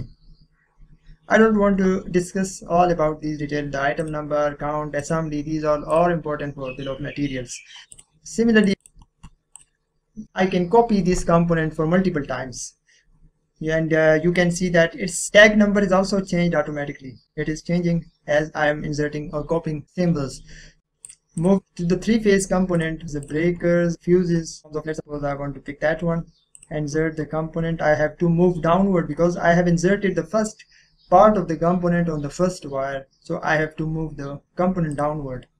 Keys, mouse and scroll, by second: 4.0 click, 7.5 click, 7.9 click, 10.9 click, 14.5-15.3 scroll up 1, 17.3-17.7 scroll down 1, 20.4-20.8 scroll down 1, 21.0 click, 22.8 click, 24.6 click, 26.5 click, 34.9-35.5 drag.